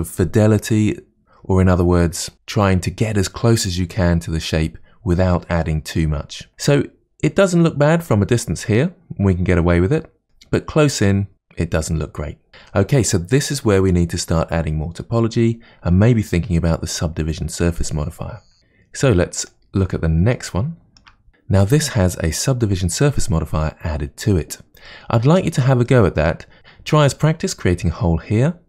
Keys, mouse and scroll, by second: 7.4-8.1 scroll down 2, 8.1-10.2 middle drag, 10.5-11.1 scroll up 2, 11.1-14.7 middle drag, 19.4 click, 20.4-21.3 shift+middle drag, 24.9-26.6 shift+middle drag.